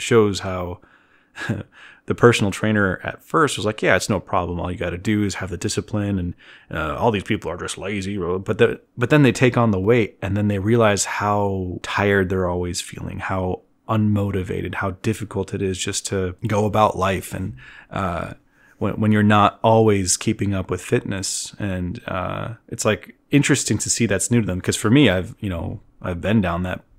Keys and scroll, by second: 25.8-26.9 typing.